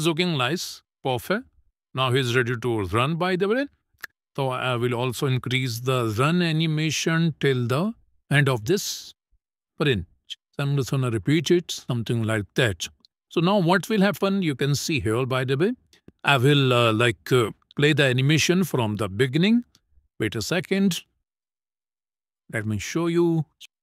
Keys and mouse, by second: 4.2 click, 4.9 click, 10.4-12.3 drag, 12.7 click, 13.5 KP_0, 22.6 click, 23.5 ctrl+middle click.